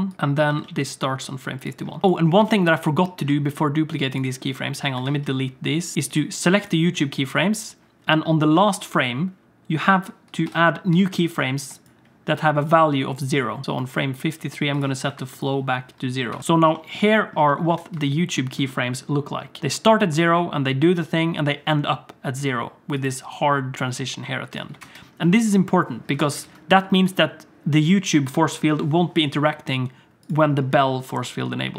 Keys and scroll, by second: 0.4 g, 2.0 x, 4.9 a, 5.1 x, 10.4 i, 10.9 i, 16.3 i, 24.8 ctrl+space, 26.1 alt+a, 26.4 ctrl+s.